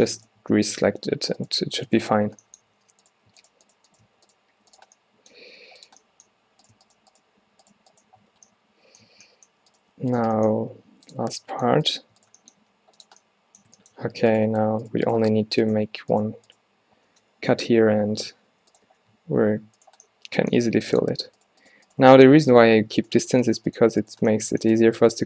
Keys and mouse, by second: 1.0 alt+w, 2.3 f, 2.8 alt+w, 3.6 shift+Tab, 4.2 g, 4.6 f, 5.5 g, 7.8 shift+Tab, 8.4 f, 9.1 a, 10.7 g, 12.7 g, 14.5 click, 15.4 alt+w, 15.8 click, 18.2 g, 18.9 f, 19.5 alt+w, 19.9-21.0 drag, 20.6 g, 22.7 f, 24.8 f, 25.1 click.